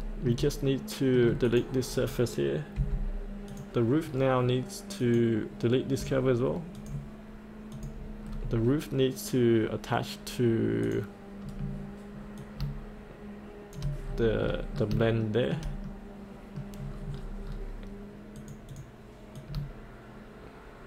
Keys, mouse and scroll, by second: 0.1 middle click, 0.1 shift+scroll down 1, 0.6 middle click, 1.4 click, 2.8 Delete, 3.5 click, 4.0 scroll down 1, 5.0 click, 5.9 Delete, 5.9 click, 6.7 click, 8.2-10.5 scroll down 1, 10.8 click, 11.4-12.4 scroll down 1, 12.4 click, 14.0-14.4 scroll up 1, 14.7 scroll up 1, 15.2 shift+middle click, 15.8 middle click, 16.8 scroll down 1, 18.4-20.8 drag.